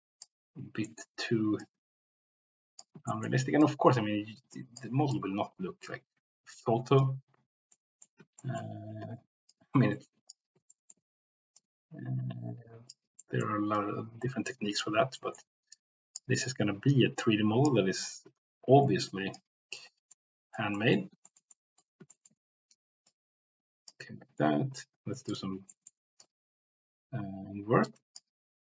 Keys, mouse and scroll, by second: 0.8 middle click, 1.6-2.8 drag, 3.0 shift+middle click, 3.6-4.8 drag, 5.1-7.0 drag, 7.7 middle click, 8.3 shift+middle click, 9.2 ctrl+z, 9.4 click, 10.7 shift+middle click, 11.5-12.9 drag, 13.1 middle click, 13.7-14.8 drag, 15.1 shift+middle click, 15.6 click, 16.4-17.6 drag, 18.0-19.3 drag, 20.1 middle click, 20.7 middle click, 21.2 shift+middle click, 21.5 middle click, 22.1 shift+middle click, 23.0 click, 25.2 click, 25.7 middle click, 26.2-28.1 drag.